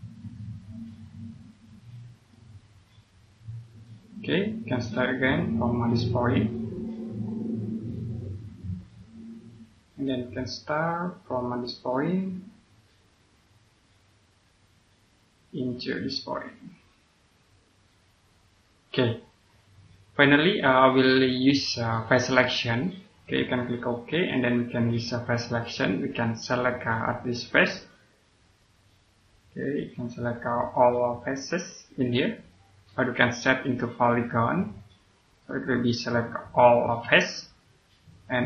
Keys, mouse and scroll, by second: 2.2 click, 6.2 click, 19.7 scroll down 1, 20.1 click, 21.4 middle click, 24.2 click, 26.9 middle click, 28.3 click, 28.7 scroll up 1, 30.5 click, 37.3 scroll down 1.